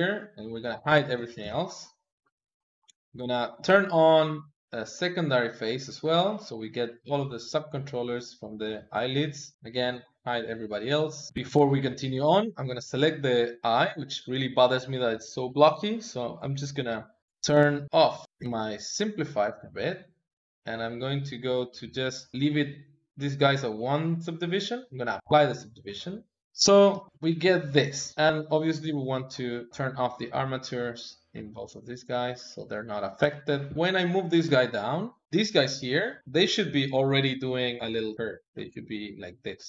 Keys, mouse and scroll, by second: 0.0 ctrl+click, 1.3 shift+h, 2.0 ctrl+middle click, 2.2 click, 2.7 h, 2.9 KP_1, 3.2-4.7 ctrl+middle drag, 4.7 click, 6.6 click, 8.7 ctrl+click, 9.7 shift+h, 10.8 click, 11.3 ctrl+Tab, 11.9 click, 15.5 click, 16.5 click, 17.8 click, 18.2 middle click, 18.9 click, 20.2 click, 24.3-26.5 drag, 26.8 g, 28.1 click, 29.2 click, 29.8-30.8 drag, 31.8-33.1 drag, 33.5 g, 35.2 click, 36.2-37.3 drag, 38.9 click.